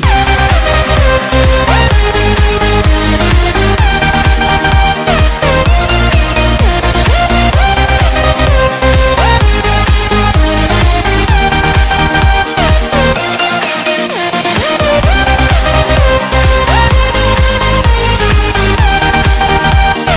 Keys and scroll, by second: 3.6 c, 5.9 Delete, 9.2 F3, 13.0 Escape, 13.3 F4, 13.9 F3, 16.3 shift+F2, 17.5 F9.